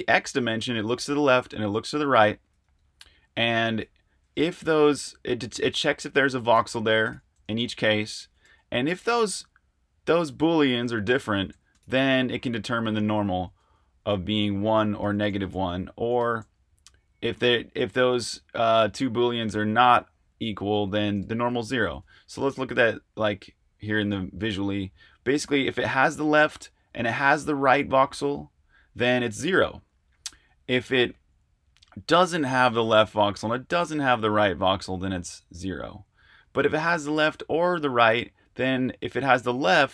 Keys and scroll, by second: 2.6 super+Tab, 4.4 Escape, 4.6-7.1 typing, 8.3-9.0 typing, 11.4 Escape, 11.5 j, 11.8 shift+v, 13.6 Escape, 15.0 shift+v, 15.4 Escape, 15.5 j, 16.1 shift+v, 18.4 Escape, 18.5-21.8 typing, 22.0 super+Tab.